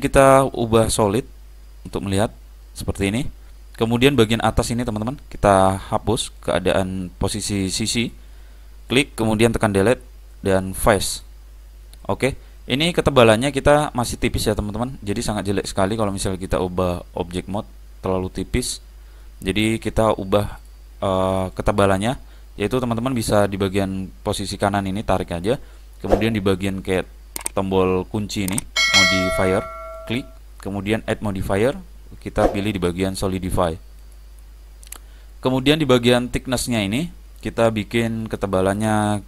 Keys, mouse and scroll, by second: 0.9 click, 2.7-4.6 middle drag, 4.9-9.8 drag, 10.0 Delete, 12.1-14.0 middle drag, 15.9 click, 15.9 typing, 17.4-19.3 middle drag, 17.6 click, 20.6 click, 24.5 click, 30.1-33.3 drag, 33.4 click, 37.6 click.